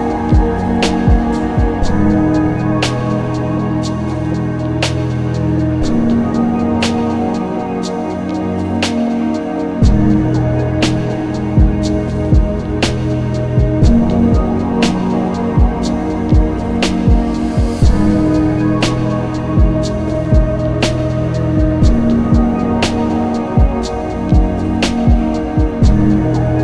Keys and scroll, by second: 6.3 ctrl+z, 7.1 z, 13.6 z, 16.9 z.